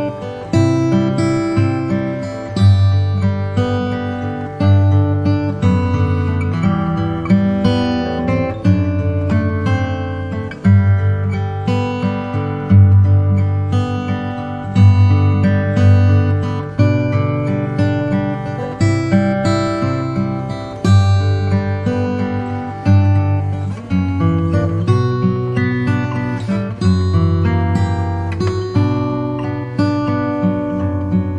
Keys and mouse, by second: 0.9 click, 1.2-2.5 drag, 8.4 ctrl+r, 10.8 s, 14.6 click, 19.8 e.